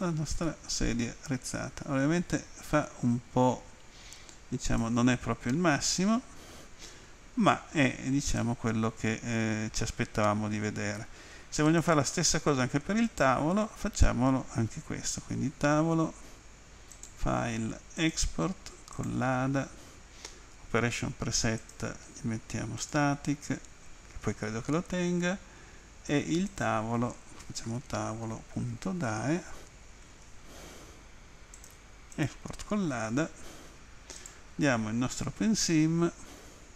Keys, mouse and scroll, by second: 5.9 alt+click, 11.7 click, 13.1 right click, 17.0 click, 18.0 click, 19.0 click, 21.7 click, 22.8 click, 26.5 click, 27.2-28.9 typing, 30.1 Tab, 30.1 typing, 31.7 click, 32.2 click, 34.2 click.